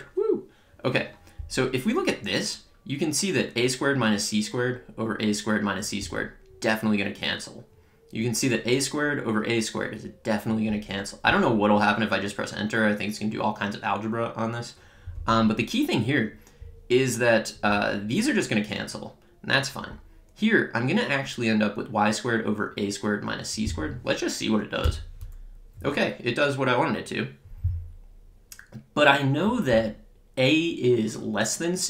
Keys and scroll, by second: 24.8 Return.